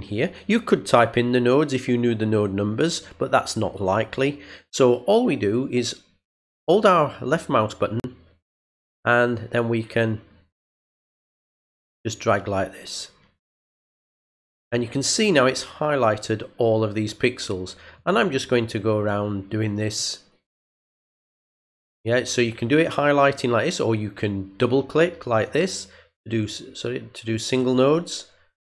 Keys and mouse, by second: 9.3-10.9 drag, 11.4-14.4 drag, 17.9-19.0 drag, 19.9-21.0 drag, 21.6-22.8 drag, 25.3 click, 25.5 click, 27.3 click.